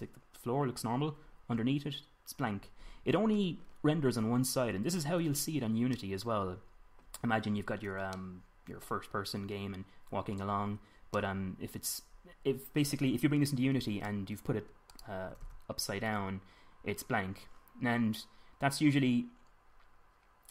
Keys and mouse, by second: 0.1-1.3 middle drag, 5.2-9.5 middle drag, 12.4-12.8 middle drag, 14.9 r, 15.9 r.